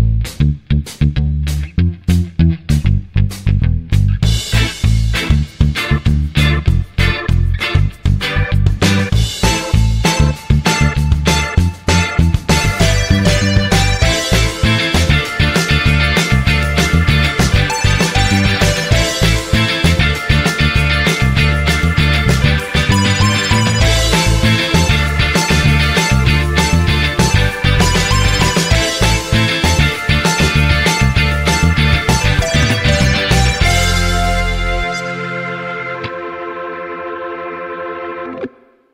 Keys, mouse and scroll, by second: 0.1 click, 1.7 click, 3.2-3.5 scroll down 2, 3.8-4.2 scroll up 2, 5.4-5.7 scroll up 2, 6.3 scroll up 2, 7.0-7.5 scroll down 4, 9.1 click, 10.5-21.7 middle drag, 24.6-25.9 drag.